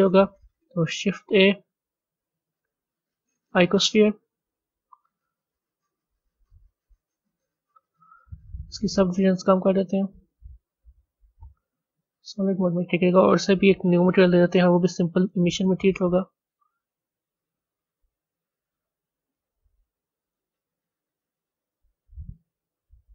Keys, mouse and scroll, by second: 5.4 click, 9.9 click, 10.9 drag, 11.7 z, 12.6-14.1 middle drag, 14.1-14.6 drag, 15.3 click, 18.7-21.1 drag.